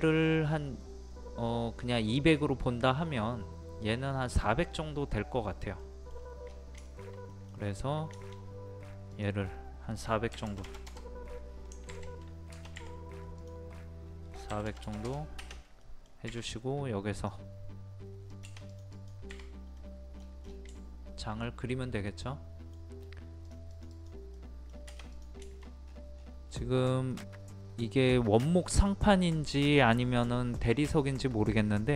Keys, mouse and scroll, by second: 4.6 scroll down 1, 5.8 middle click, 6.1 scroll down 1, 6.8 shift+middle click, 7.7 scroll up 1, 8.1 middle click, 9.1-10.1 drag, 10.3 KP_4, 13.4 click, 14.5 KP_4, 15.8 middle click, 17.1 click, 19.8 middle click, 20.1-20.4 scroll down 1, 20.5 scroll up 1, 20.8-23.0 shift+middle drag, 23.4 click, 24.3 middle click, 24.7-25.1 scroll down 1, 25.1 click, 25.4 shift+middle click, 25.8 scroll up 1, 27.1-28.1 middle drag.